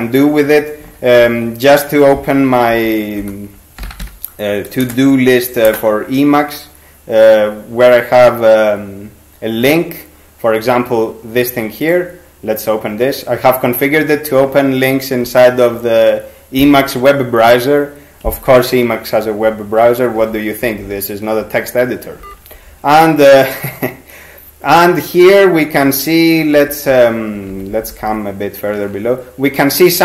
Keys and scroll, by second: 0.8 ctrl+x, 1.2 ctrl+f, 2.7-4.5 typing, 4.8 Return, 5.7 Return, 20.2 ctrl+x, 20.6 ctrl+=, 20.8 ctrl+=, 22.2 ctrl+g, 26.6 ctrl+n, 26.9 ctrl+n, 27.5 ctrl+shift+n, 27.7 ctrl+shift+n, 27.9 ctrl+shift+n, 28.1 ctrl+shift+n.